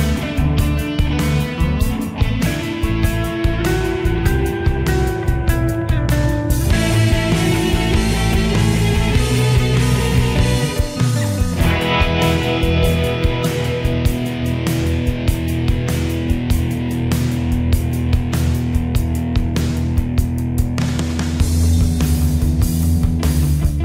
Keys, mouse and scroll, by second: 12.9 right click, 13.9 click, 18.6 shift+Page_Down, 20.4 right click, 21.3-23.8 drag.